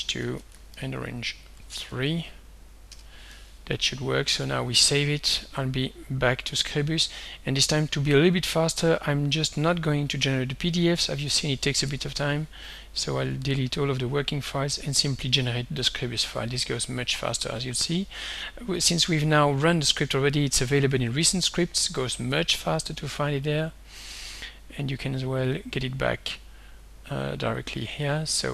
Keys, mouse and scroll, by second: 0.0-1.9 typing, 2.9 Return, 3.7 ctrl+s, 6.4 click, 7.7 click, 9.6 click, 10.6 shift+click, 11.9 shift+Delete, 13.4 click, 15.5 click, 17.5 click, 22.4 click, 24.2 click, 25.5 click, 26.2 click, 27.5 click, 28.1 click.